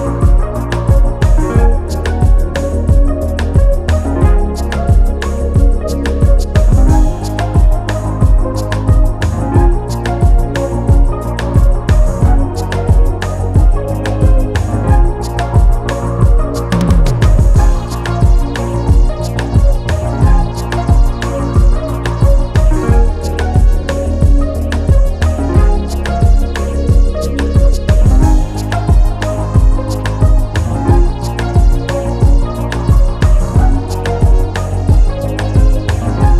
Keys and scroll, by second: 13.3 [, 14.3 [.